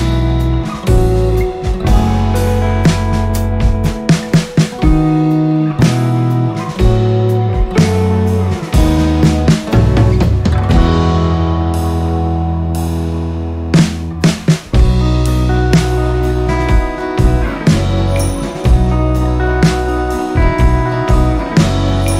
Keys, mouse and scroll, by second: 5.0 ctrl+z, 5.3-8.6 drag, 13.1 shift+click, 16.8 ctrl+scroll down 1, 17.6 ctrl+scroll up 1, 19.0 click, 19.8 ctrl+scroll up 1, 21.1 click.